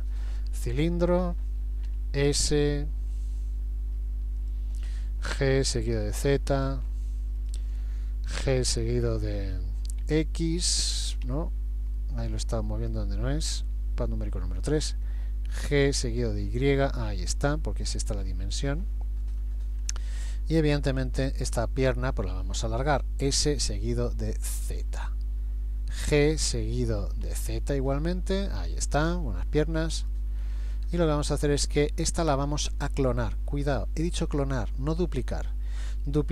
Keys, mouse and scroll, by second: 1.9 s, 5.3 g, 8.5 g, 12.0 middle click, 13.7 KP_3, 15.9 g, 19.8-20.6 scroll up 1, 21.1 shift+middle click, 21.1-21.6 scroll up 1, 21.9-22.8 scroll down 1, 22.8-23.3 scroll down 2, 23.3 s, 26.1 g, 30.4-31.3 scroll up 4.